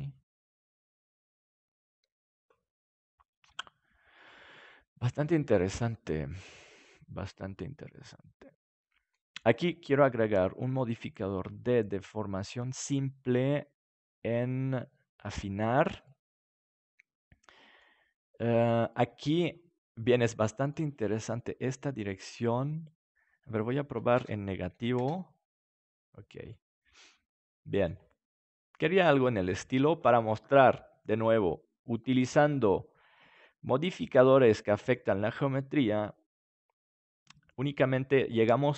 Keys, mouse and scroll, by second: 0.3 right click, 2.2 click, 3.7 Tab, 7.3-8.9 right drag, 7.8-8.9 drag, 8.9-10.1 middle drag, 10.1-11.8 drag, 15.5-17.3 drag, 16.0-18.0 middle drag, 18.9-20.9 middle drag, 22.8-25.9 drag, 26.5-31.9 middle drag.